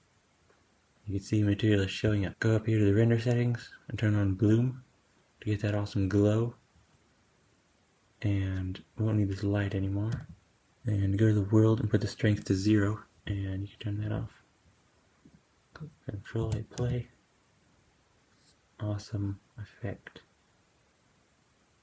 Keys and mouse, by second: 4.2 click, 10.0 typing, 10.9-11.3 drag, 11.8-14.0 drag, 16.3 space, 16.6 g.